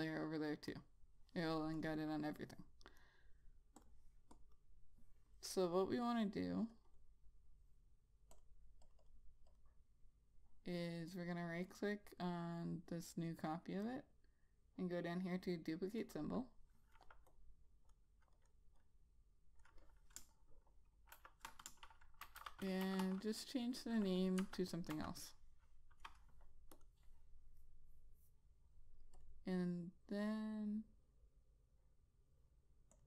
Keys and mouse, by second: 2.3 double click, 3.4 right click, 4.2 click, 4.9 double click, 7.1 double click, 8.8 click, 9.5 double click, 9.9 click, 14.3 right click, 17.7 click, 21.6-23.8 typing, 25.4 ctrl+a, 27.2 click.